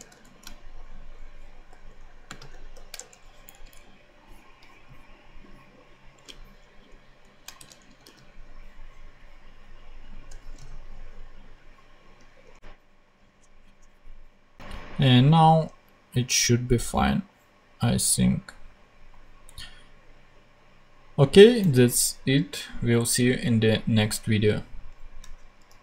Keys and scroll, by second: 0.0 super+v, 1.6 shift+;, 2.2 shift+space, 2.4 shift+[, 2.9 shift+Return, 3.4 Down, 3.6 Up, 6.8 alt+shift+Up, 7.5 alt+shift+Tab, 7.7 Down, 7.9 super+x, 12.5 super+Tab, 13.2 super+Tab, 15.4 super+Tab.